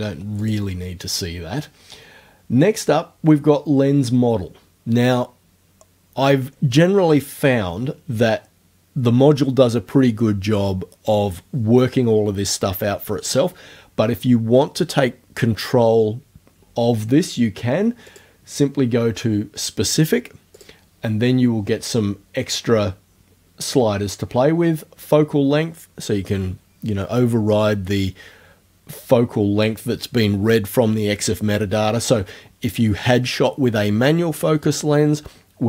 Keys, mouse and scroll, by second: 0.4 click, 18.1 click, 20.6 click.